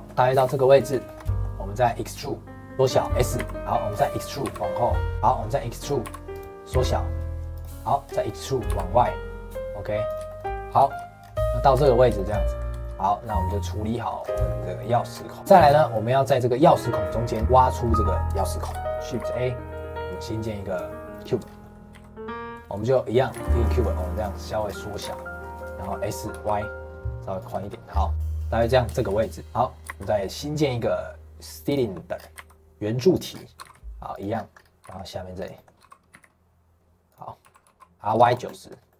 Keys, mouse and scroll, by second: 0.3 s, 1.0-2.7 shift+middle drag, 2.7 e, 3.6 middle click, 3.9-4.4 scroll up 1, 4.4 e, 5.1 middle click, 6.0 e, 7.7 middle click, 8.0 scroll down 2, 8.2 middle click, 8.6 e, 10.2 shift+middle click, 10.6 scroll up 2, 10.9 shift+middle click, 11.2 scroll down 2, 11.3 middle click, 11.7 Tab, 12.1-13.4 shift+middle drag, 13.4 scroll down 2, 13.6 middle click, 14.2 scroll up 2, 14.4 middle click, 15.0 scroll down 4, 15.3 middle click, 15.6 scroll up 2, 15.9 middle click, 16.2-17.3 scroll up 2, 17.3 scroll down 2, 17.4-18.6 middle drag, 18.6 scroll down 3, 18.8 shift+middle click, 18.9 middle click, 19.1 shift+a, 21.4 scroll down 2, 21.6 middle click, 21.9 s, 22.6 middle click, 23.3 s, 24.3 middle click, 24.6-24.9 scroll down 2, 24.9 s, 25.8 s, 27.5 shift+middle click, 27.8 scroll down 2, 28.1-29.8 middle drag, 29.8 shift+a, 32.1 scroll down 4, 32.3 s, 33.3 scroll up 1, 33.5 g, 34.3-34.6 scroll up 3, 34.6 scroll down 1, 34.8 g, 35.5 middle click, 35.8 g, 37.4 r, 38.8 middle click.